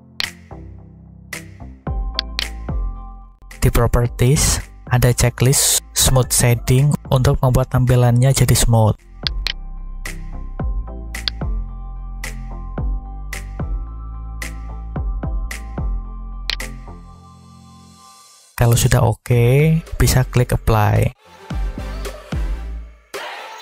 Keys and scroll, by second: 21.9 Tab.